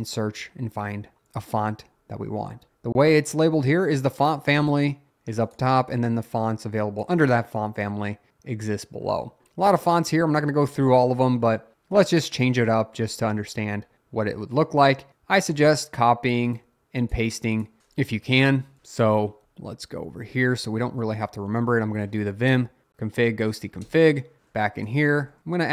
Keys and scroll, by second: 18.2 Up, 18.3 Up, 18.8 Return, 19.3 Up, 19.4 Down, 20.0 Up, 20.2 Up, 23.8 Return, 24.9-25.4 typing.